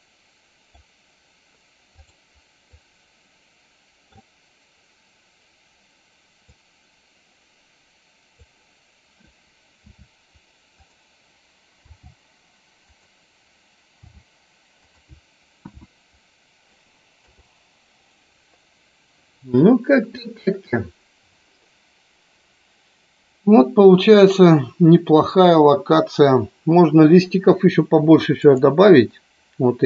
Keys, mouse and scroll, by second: 2.3 click, 2.9-4.4 middle drag, 6.5-8.5 drag, 10.9 click, 11.9 g, 14.1 r, 15.0 click, 15.8 KP_1, 17.3 KP_0.